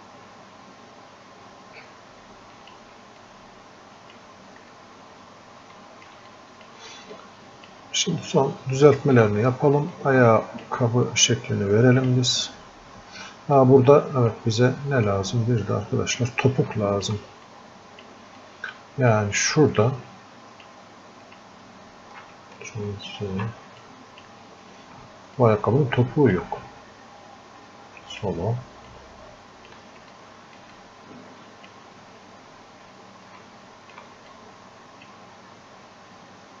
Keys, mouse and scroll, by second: 3.3-4.7 drag, 4.7-5.7 scroll up 1, 5.8 alt+click, 6.3 click, 7.2-9.2 drag, 9.2 click, 11.1-12.9 drag, 12.9 scroll down 1, 13.6 click, 14.7 click, 15.4 scroll up 1, 16.7 alt+click, 17.5 click, 18.4-19.9 drag, 19.9-21.3 drag, 21.3 ctrl+shift+click, 23.2 ctrl+z, 23.8-25.4 drag, 25.4 click, 26.9 scroll up 1, 28.2 click, 30.1-32.5 alt+drag, 32.5 scroll down 1, 33.4 alt+click, 34.4-36.6 drag.